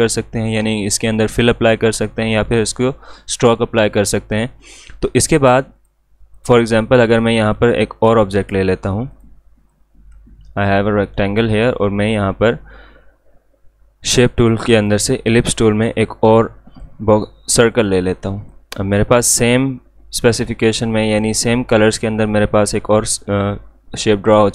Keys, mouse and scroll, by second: 5.7-12.3 drag, 12.3 right click, 14.8-24.5 drag.